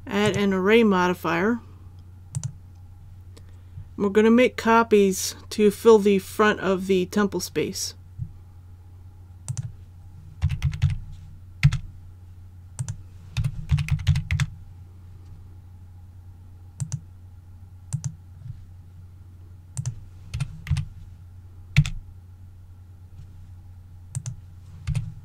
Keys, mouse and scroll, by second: 0.2 click, 10.4 KP_2, 10.6 KP_Decimal, 10.8 KP_2, 12.8 click, 13.7 KP_2, 13.9 KP_Decimal, 14.1 KP_2, 16.8 click, 20.7 KP_2, 24.1 click.